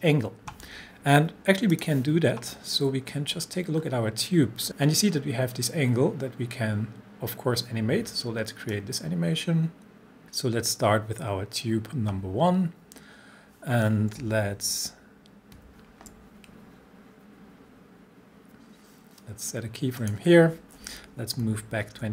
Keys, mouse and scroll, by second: 1.7 click, 3.0 scroll up 1, 8.7-11.0 drag, 14.2 click, 14.4 shift+Page_Down, 20.0 click, 21.0 shift+Page_Up.